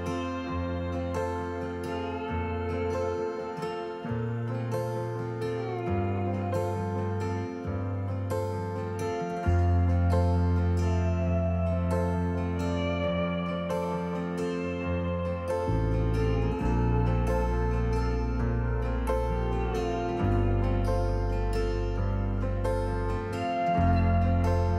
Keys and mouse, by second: 1.0 middle click, 5.1-5.8 shift+middle drag, 7.0-8.1 shift+middle drag, 8.4 click, 9.9-12.4 shift+middle drag, 14.4-15.6 drag, 17.5-19.2 drag.